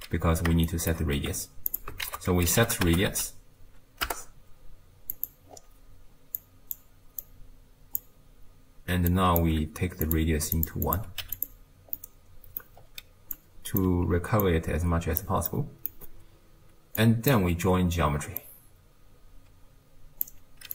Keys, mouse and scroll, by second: 0.7 shift+right click, 1.2 g, 2.1 ctrl+a, 5.5-6.4 scroll up 2, 6.4 click, 7.2 drag, 9.1 click, 10.0 click, 10.9 click, 12.0 middle click, 12.8-13.4 scroll down 1, 13.4 click, 14.1 ctrl+x, 14.4 click, 15.5-17.0 middle drag, 17.0 click, 18.4 drag.